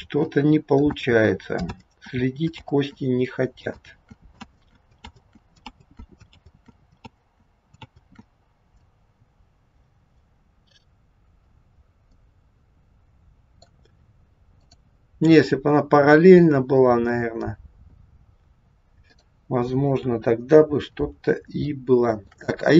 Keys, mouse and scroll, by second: 0.1 ctrl+z, 1.1 ctrl+z, 1.8 ctrl+z, 2.7 ctrl+z, 3.8 ctrl+z, 4.0 ctrl+click, 4.6 ctrl+z, 5.2 ctrl+z, 5.8 ctrl+z, 6.4 ctrl+z, 7.2 ctrl+z, 7.9 ctrl+z, 12.2 middle click, 14.5 click, 18.9 click, 20.0 KP_1, 20.7-21.1 scroll down 1, 21.7 shift+middle click.